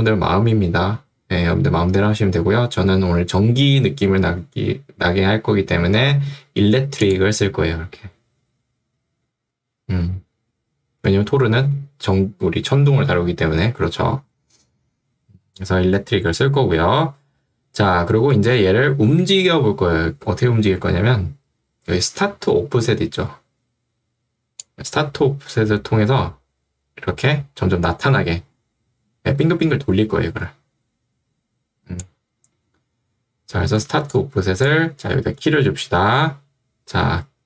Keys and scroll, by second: 33.9 ctrl+2, 35.1 Escape.